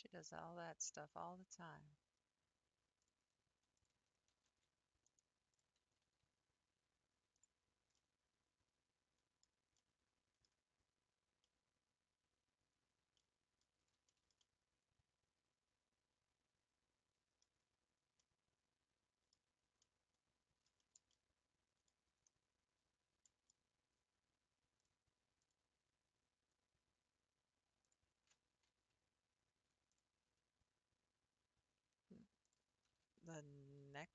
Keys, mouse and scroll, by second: 3.8 shift+click, 4.3 g, 5.6 click, 5.8 g, 7.6-8.0 scroll down 5, 8.0-9.3 middle drag, 9.3 scroll down 2, 9.8 middle click, 10.5-11.5 scroll up 3, 11.5-17.4 middle drag, 17.6 scroll up 3, 18.3-19.4 middle drag, 19.4-19.8 scroll down 3, 19.8-21.8 middle drag, 21.8-22.7 scroll down 3, 22.7 scroll up 4, 23.2 shift+middle click, 23.7 scroll down 1, 24.8 click, 25.5 click, 26.1-27.1 scroll up 2, 27.9 click, 30.0 click, 32.5 shift+click, 32.9 g.